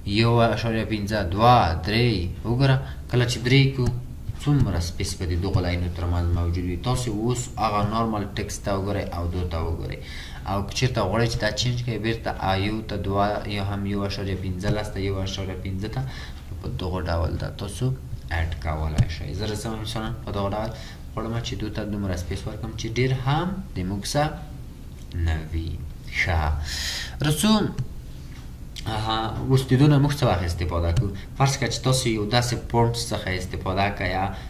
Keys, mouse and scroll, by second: 4.8-5.3 ctrl+scroll down 1, 5.7-6.3 ctrl+scroll down 1, 6.4 scroll up 1, 7.1 scroll up 1, 7.1-7.8 ctrl+scroll, 7.8 ctrl+scroll up 2, 8.6 scroll down 1, 9.7-12.0 scroll up 1.